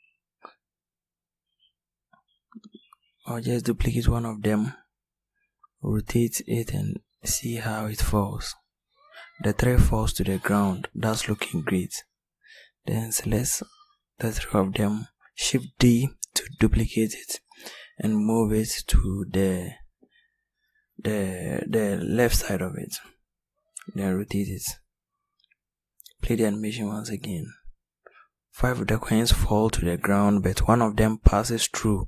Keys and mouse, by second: 0.9 r, 11.4 click, 14.6 shift+d, 19.0 r.